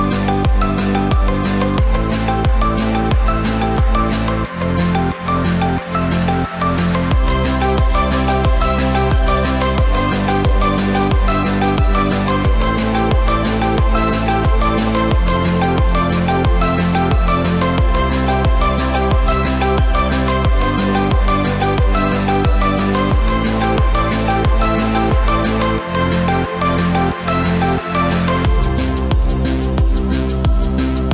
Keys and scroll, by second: 1.3 ctrl+t, 19.8 ctrl+t, 29.1 ctrl+j, 29.5 ctrl+t.